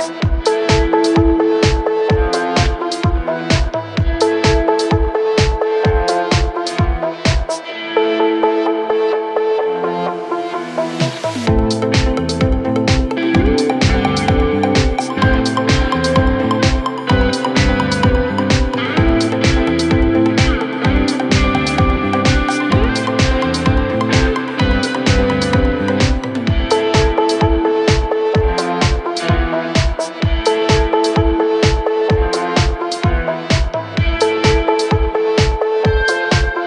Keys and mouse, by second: 1.6 s, 2.2-4.0 middle drag, 2.6 s, 4.0-7.1 drag, 7.1-12.8 middle drag, 10.7 s, 11.8 s, 12.8-15.7 drag, 13.8 KP_1, 14.2 KP_3, 15.2 r, 15.7-17.0 middle drag, 15.8 g, 17.0-19.8 shift+drag, 19.2 g, 19.8-24.8 middle drag, 20.3 s, 20.9 s, 22.0 KP_1, 22.0 KP_3, 23.0 g, 23.8 g, 24.8-29.6 drag, 28.7 s, 29.6 middle click, 29.9-32.6 drag, 32.6 middle click, 32.9-36.2 drag, 35.0 ctrl+z, 36.2 middle click.